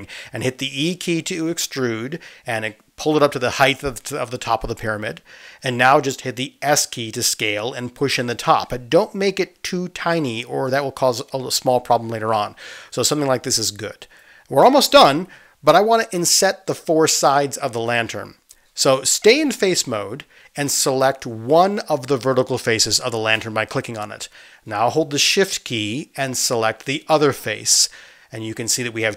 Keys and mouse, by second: 0.8 space, 2.1 e, 8.1-14.5 drag, 9.5 s, 14.5-18.5 middle drag, 18.5-23.8 drag, 23.8-29.1 middle drag.